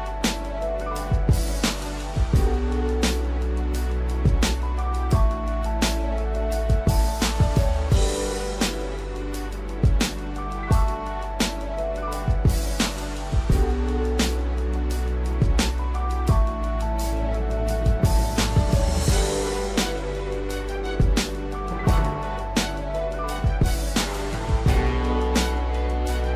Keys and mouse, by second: 3.8 shift+middle click, 4.7 click, 5.8 g, 8.1 shift+middle click, 9.8 click, 10.5 g, 11.8 click, 12.1 g, 14.9 ctrl+r, 16.3 g, 17.9 shift+middle click, 19.3 x, 20.7 shift+middle click, 21.9 shift+middle click, 23.2 shift+middle click, 24.5 click, 26.2 shift+middle click.